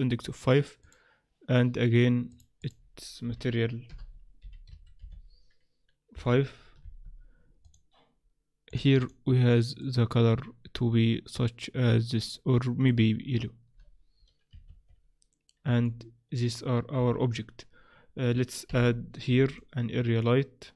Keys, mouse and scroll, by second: 0.8 click, 2.3 click, 7.6 click, 9.0 click, 14.7 shift+z, 15.8 middle click, 17.0 z, 18.6 KP_7, 19.4 click.